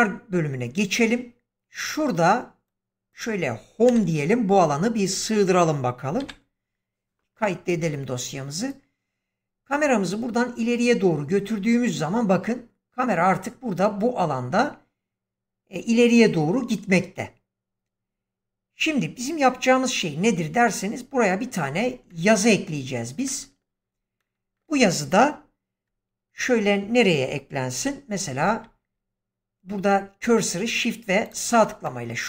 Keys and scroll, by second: 3.8 Home, 6.1 ctrl+s, 27.7 7.